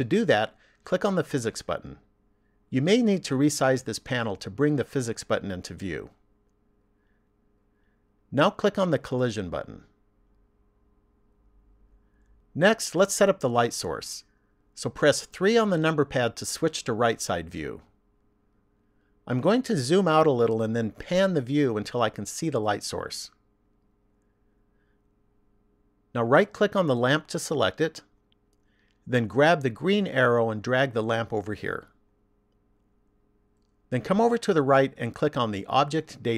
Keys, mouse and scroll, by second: 2.4 click, 6.4 click, 9.2 click, 15.4 KP_3, 20.2-21.8 scroll down 5, 21.8-24.1 scroll down 4, 24.1 shift+middle click, 28.9 right click, 30.4 click.